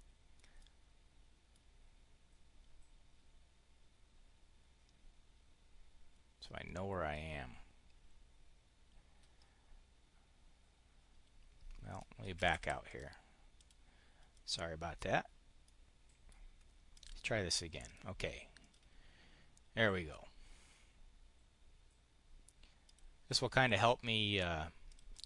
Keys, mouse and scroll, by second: 0.4-1.5 drag, 12.1 Escape, 12.7 click, 13.4 click, 14.2 click, 15.5 click, 16.8 click, 17.7 click, 18.4 click, 22.7 click, 23.5 click, 24.8 click, 25.0 click.